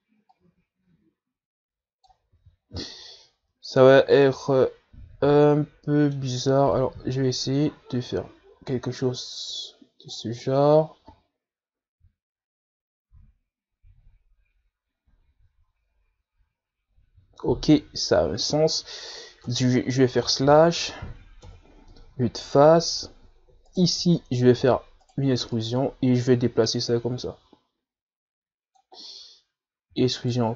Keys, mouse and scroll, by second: 0.6-1.0 scroll down 1, 1.6-3.6 drag, 3.6 ctrl+z, 5.3 z, 5.5-8.0 middle drag, 8.0-11.0 drag, 11.7-14.7 middle drag, 20.7 KP_Divide, 21.6-22.3 scroll up 3, 22.3-22.7 scroll up 1, 22.7 KP_1, 23.5-24.9 scroll up 6, 24.9 alt+right click, 25.8 e, 26.8-29.8 drag, 30.3-30.5 scroll down 1.